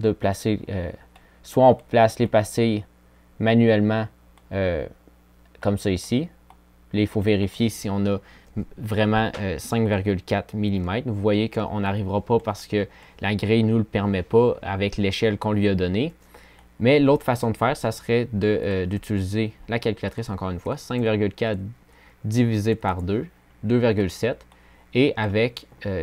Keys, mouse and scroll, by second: 1.6 click, 8.4-8.9 drag.